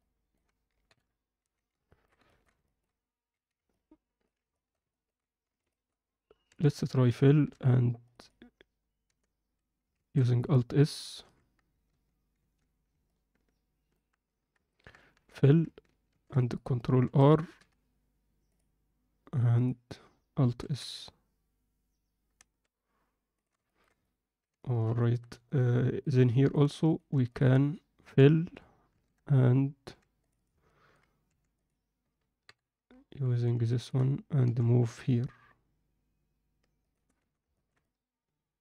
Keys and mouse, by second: 0.8 KP_7, 1.4 z, 1.8 ctrl+middle click, 2.2 alt+shift+middle click, 2.6 ctrl+middle click, 3.3 z, 3.6 alt+middle click, 4.5 alt+shift+middle click, 6.4 f, 7.4 ctrl+r, 9.0 g, 11.8 ctrl+z, 12.4 ctrl+z, 13.0 alt+middle click, 15.1 f, 16.1 ctrl+r, 17.0 a, 17.5 m, 19.6 click, 20.6 alt+s, 23.6 ctrl+middle click, 24.0 alt+middle click, 24.6 alt+shift+middle click, 25.0 ctrl+alt+middle click, 25.4 middle click, 26.2 middle click, 28.0 f, 28.8 ctrl+r, 30.6 middle click, 31.2 3, 32.4 KP_7, 33.2 z, 33.6 ctrl+middle click, 34.4 g, 37.2 z, 37.5 ctrl+alt+middle click, 37.8-38.6 alt+middle drag.